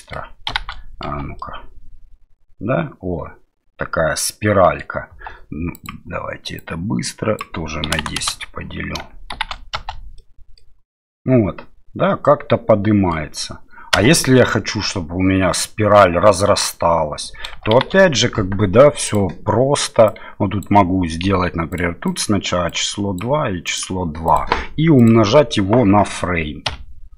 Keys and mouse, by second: 0.5 shift+Left, 1.0 space, 1.4-4.8 middle drag, 5.1 space, 5.8-8.5 drag, 9.3 shift+Left, 9.7 space, 10.2 middle click, 11.1-13.1 middle drag, 13.9 space, 17.7 shift+Left, 19.2-21.8 drag, 22.2-23.8 drag, 24.3-27.1 drag.